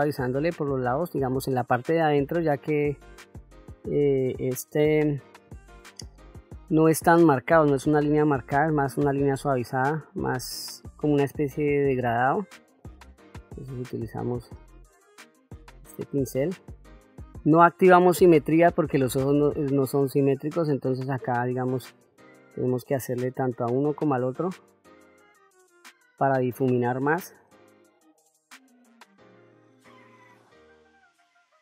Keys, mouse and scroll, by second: 0.0 shift+middle click, 1.5 f, 3.6 middle click, 4.9 f, 6.7-10.3 drag, 10.7 middle click, 11.6-14.5 drag, 16.3-21.5 drag, 21.8 middle click, 22.5 middle click, 23.6-25.2 drag, 26.2-27.7 drag, 28.0 middle click, 28.7 click, 29.6 middle click, 30.0 click, 30.1 ctrl+middle click, 30.5 middle click, 30.7 middle click, 30.9 f, 31.2 click.